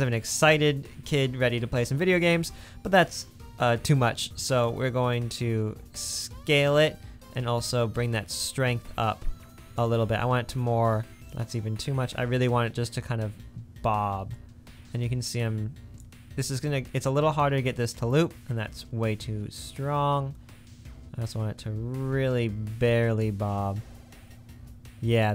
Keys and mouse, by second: 2.4 space, 7.5 click, 10.1 space, 10.9 space, 11.4 click, 11.6 middle click, 16.6 space, 18.6 space, 23.4 space.